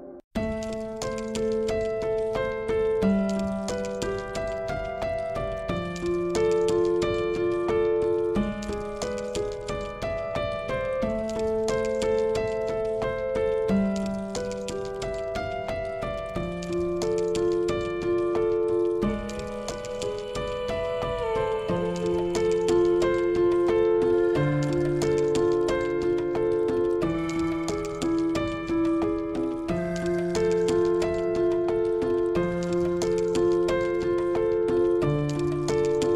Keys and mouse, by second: 3.1 s, 6.9-7.4 drag, 7.8 click, 9.0 shift+click, 14.3-15.6 drag, 17.0-18.3 drag, 18.5 KP_7, 19.3 g, 21.1-21.6 middle drag, 22.0-22.9 middle drag, 25.7-26.5 drag, 26.5 Tab, 27.7 ctrl+r, 29.2 ctrl+r, 31.6 click, 32.2 Tab, 33.8 click, 34.1 shift+click.